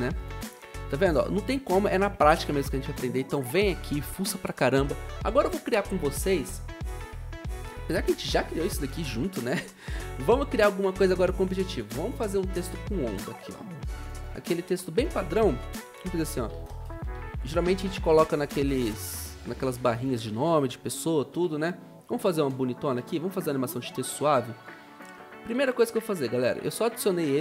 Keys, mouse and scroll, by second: 9.4 Delete, 9.4 v, 15.6-17.7 typing, 20.6-21.9 typing.